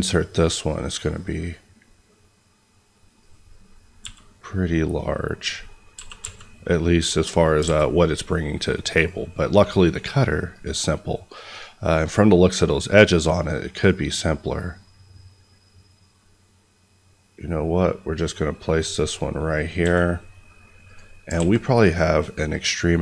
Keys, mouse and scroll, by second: 0.8-3.1 scroll, 3.1 click, 5.3 click, 5.9 g, 6.1 x, 7.4 click, 7.6 alt+a, 8.0 middle click, 8.9 click, 13.5 scroll down 1, 18.8 click, 19.4-19.8 scroll up 1, 19.8 s, 20.8 click, 21.3 alt+a, 21.7 click.